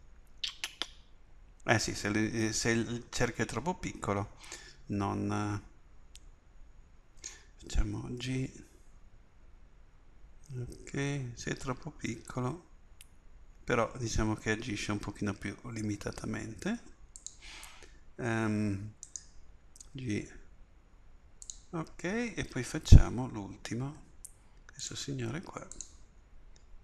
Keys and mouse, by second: 5.4 r, 8.2 g, 17.3-19.1 middle drag, 19.1 right click, 19.9 g, 23.5 ctrl+r.